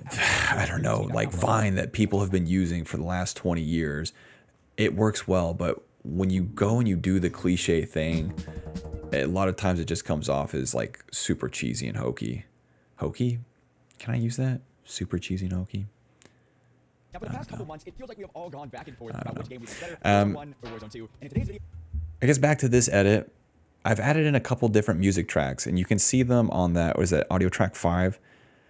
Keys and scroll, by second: 1.5-3.6 typing, 6.1-8.0 typing, 9.1 space, 11.3 d, 11.5 d, 12.0 d, 12.1 d, 12.9 ctrl+c, 13.2 alt+v, 14.9 s, 16.3 s, 16.4 s, 16.5 s, 17.0 space, 20.7 d, 21.5 space, 25.3-28.0 typing.